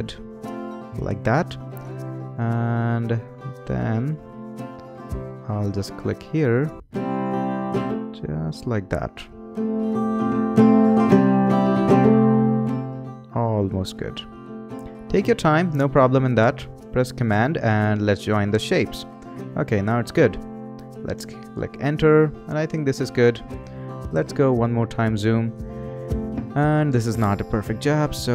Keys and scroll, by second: 21.1 Return.